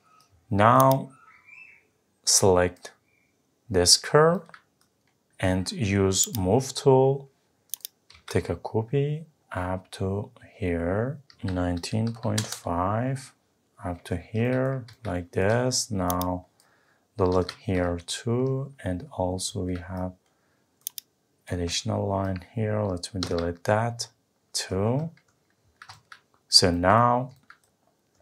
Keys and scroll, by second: 12.4 Return, 17.3 Delete, 23.2 Delete.